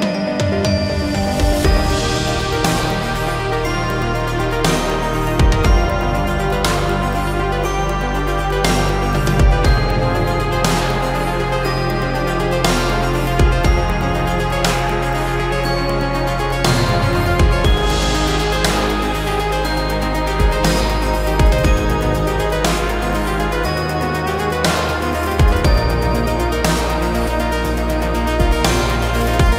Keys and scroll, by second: 1.2 space, 2.2 Delete, 4.1 p, 6.6 space, 7.1 space, 7.4 Escape, 15.2 space, 17.1 f, 20.4 space, 21.8 m, 23.4 space, 24.3 Delete, 25.8 shift+r, 27.7 p, 29.0 space.